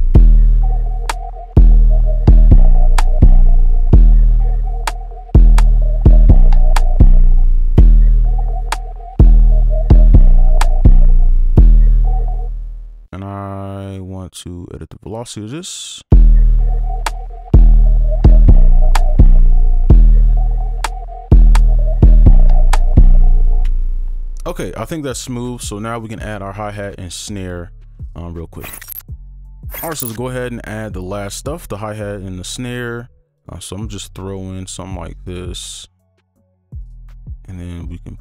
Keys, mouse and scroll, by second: 1.8 double click, 2.3 right click, 7.8 space, 11.1 space, 16.1 space, 17.9 double click, 35.2 double click, 36.2 right click, 36.9 ctrl+a, 38.0 shift+click.